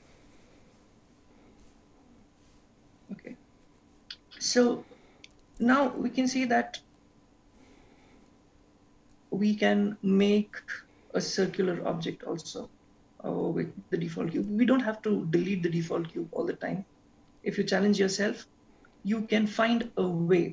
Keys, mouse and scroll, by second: 0.4-1.1 scroll up 3, 1.1 middle click, 4.5-5.4 scroll down 2, 5.4 middle click.